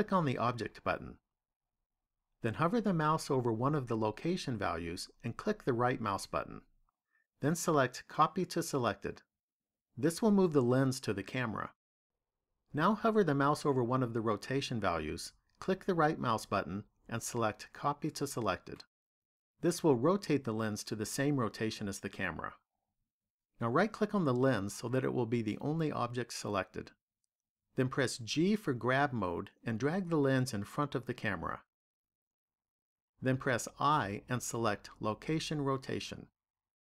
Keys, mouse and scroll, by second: 0.3 click, 5.4 right click, 15.2 right click, 24.5 right click, 28.3 g, 30.9 click, 33.7 i.